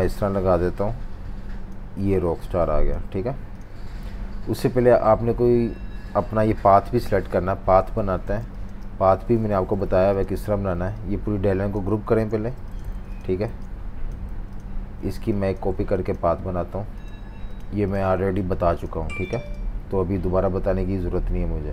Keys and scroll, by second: 7.3 super+-, 7.4 super+-, 8.2 typing, 9.4 super+-, 10.5 super+3, 12.2 super+g, 13.4 alt+super+z, 14.2 typing, 19.0 super+3.